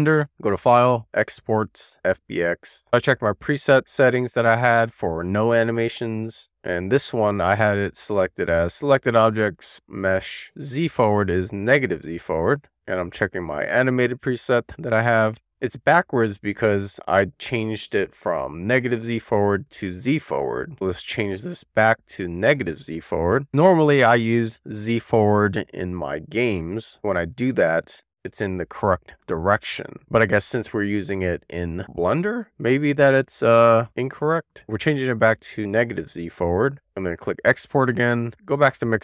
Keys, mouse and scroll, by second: 0.2-2.7 drag.